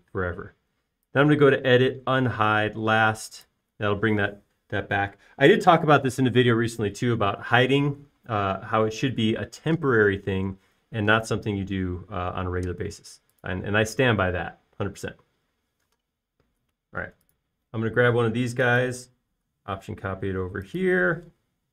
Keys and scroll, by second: 17.2 q.